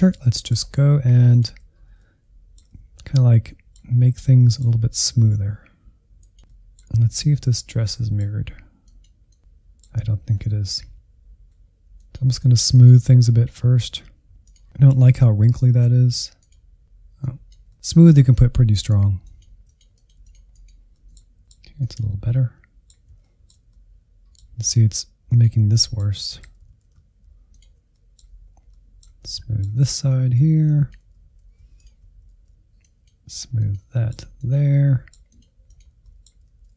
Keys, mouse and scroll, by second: 0.0 ctrl+click, 0.3 middle click, 0.8 alt+z, 1.0 middle click, 1.6 scroll up 1, 1.7-3.0 middle drag, 3.0 click, 3.9 middle click, 4.3 scroll down 2, 4.4-5.9 middle drag, 5.9 click, 6.6-8.4 middle drag, 8.4 click, 9.1 middle click, 9.6 click, 10.1 middle click, 10.8 ctrl+z, 10.9 ctrl+z, 11.5 click, 12.1 ctrl+z, 12.2 click, 12.3 middle click, 12.8 ctrl+click, 13.0 middle click, 13.1 alt+z, 13.3 click, 13.4 middle click, 13.6 click, 14.1 alt+z, 14.9 click, 15.7 alt+z, 16.1 ctrl+click, 16.2 alt+z, 16.4 click, 17.2-18.3 middle drag, 18.3 click, 19.1 middle click, 19.4 alt+z, 20.0 alt+z, 20.2 click, 20.6 scroll down 2, 20.8 alt+z, 21.3 ctrl+click, 21.5 alt+z, 21.6 scroll up 1, 21.9 click, 22.4 alt+z, 22.8 ctrl+Left, 23.0 alt+z, 23.4 click, 23.9 scroll down 2, 24.0 middle click, 24.5 click, 24.8-26.2 middle drag, 26.2 click, 26.4 middle click, 26.9 alt+z, 27.6 ctrl+Left, 28.0 scroll up 1, 28.1 middle click, 28.3 alt+z, 28.4 middle click, 28.8 click, 29.4 alt+z, 30.0 ctrl+Left, 30.1 alt+z, 30.4 click, 31.0 middle click, 31.3 click, 31.5 middle click, 31.8 click, 32.2 middle click, 32.4 alt+z, 33.0 ctrl+click, 33.2 middle click, 33.5 alt+z, 33.6 middle click, 33.9 click, 34.5 middle click, 34.8 click, 35.2 middle click, 35.5 click, 35.8 alt+z, 36.3 ctrl+click, 36.4 alt+z, 36.6-36.7 drag.